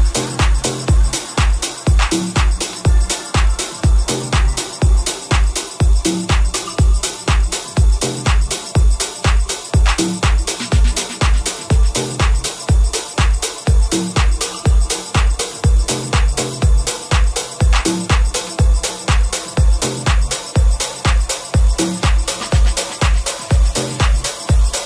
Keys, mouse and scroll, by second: 5.8-7.0 ctrl+middle drag, 7.0 right click, 7.1-18.5 middle drag, 8.0 alt+e, 17.3 ctrl+z, 19.7 ctrl+shift+z, 20.4 g, 24.4-24.8 shift+middle drag.